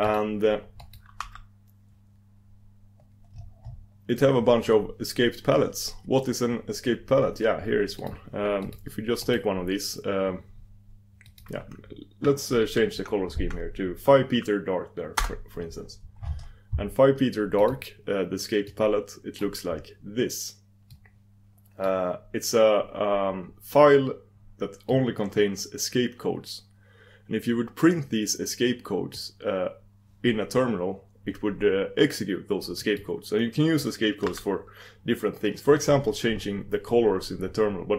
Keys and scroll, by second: 0.0 super+e, 5.7 super+e, 8.0 super+e, 12.6 super+d, 19.6 super+d, 23.1 super+d, 33.0 super+d.